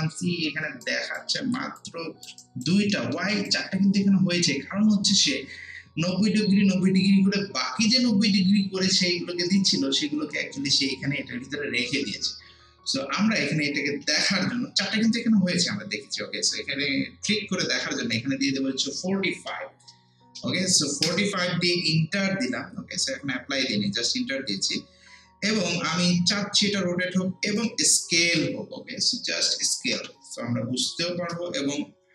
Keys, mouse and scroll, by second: 0.7 scroll up 1, 0.8 alt+right click, 1.4 alt+middle click, 1.8 alt+click, 2.4 alt+right click, 2.9 alt+middle click, 3.3 alt+right click, 13.0 alt+right click, 14.0 ctrl+z, 17.6-19.1 drag, 18.8-19.9 typing, 21.0 Return, 27.6-29.9 drag, 29.9 1, 31.2 Return.